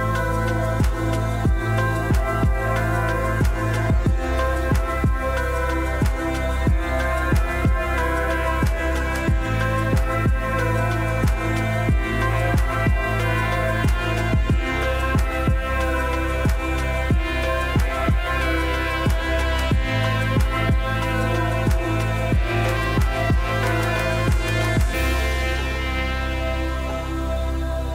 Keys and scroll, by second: 0.0 Delete.